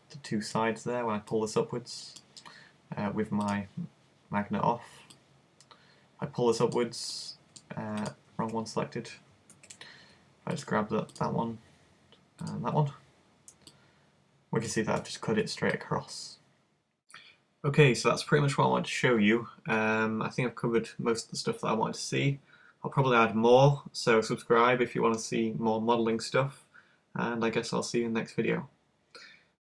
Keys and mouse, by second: 3.5-7.1 drag, 8.4 z, 9.6 z, 11.6-12.7 super+drag, 13.7-15.3 drag, 13.7 right click, 18.7 click, 19.9 middle click.